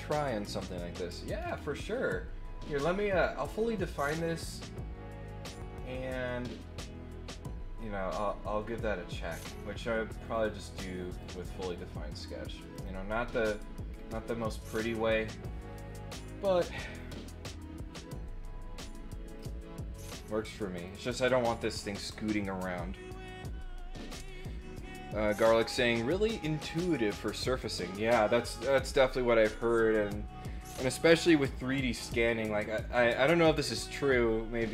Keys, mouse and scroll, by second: 1.4 middle click, 1.6 middle click, 10.1 click, 10.9 click, 12.7 click, 13.9 scroll down 2, 14.3 scroll up 1, 16.5 click, 19.2 click, 20.7 click, 26.7 click.